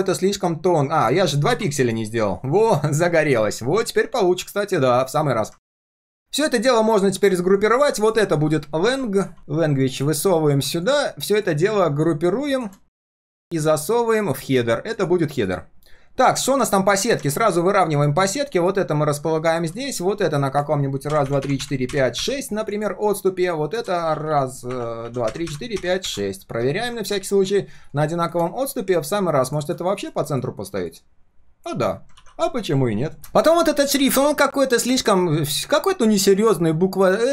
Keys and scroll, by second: 5.6 ctrl+s, 8.8 ctrl+r, 10.5 ctrl+s, 15.8 ctrl+shift+3, 16.1 ctrl+shift+3, 16.4 ctrl+shift+4, 28.5 ctrl+shift+4, 30.0 alt+h, 32.1 ctrl+s.